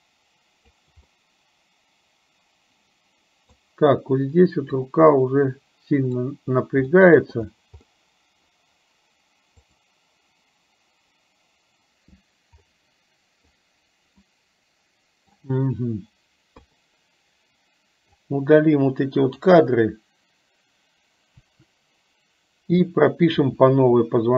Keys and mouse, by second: 1.2-3.6 middle drag, 4.9-6.4 drag, 7.1 middle click, 7.9 middle click, 9.8 click, 12.8 middle click, 14.3-15.3 middle drag, 16.6 KP_3, 18.2-19.6 drag, 21.6 Delete, 23.6 r.